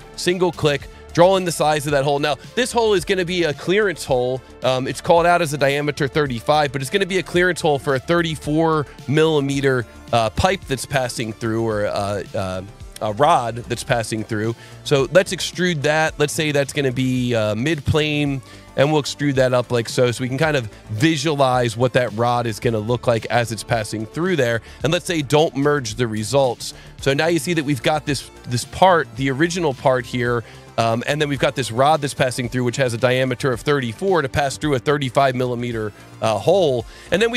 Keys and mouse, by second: 0.4 click, 6.6 KP_3, 7.0 KP_4, 7.7 KP_Enter, 11.6 s, 14.9 click, 17.4 click, 18.1 click, 19.2 click, 21.1 click, 23.0 click, 25.1 click, 26.0 click, 27.6 click, 28.5 click, 29.9 click, 32.2 click, 33.4 click, 36.0 s, 36.7 click.